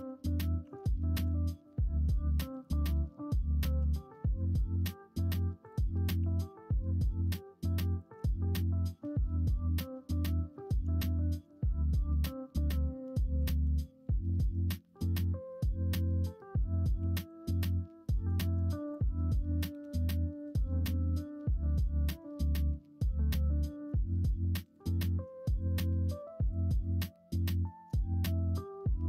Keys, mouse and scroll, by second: 0.6 r, 6.1 r, 8.7 shift+middle click, 11.0 shift+middle click, 13.3 2, 16.9 2, 22.5 click.